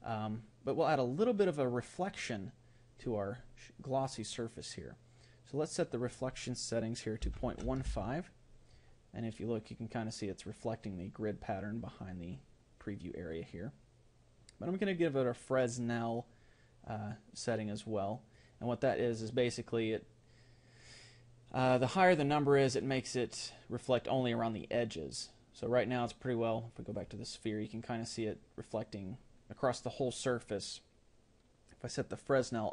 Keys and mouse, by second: 17.8-32.7 drag.